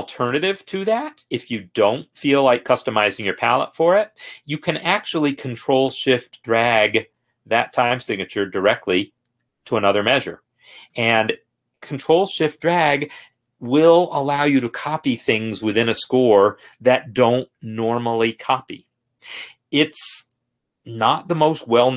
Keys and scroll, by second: 2.8 ctrl+z.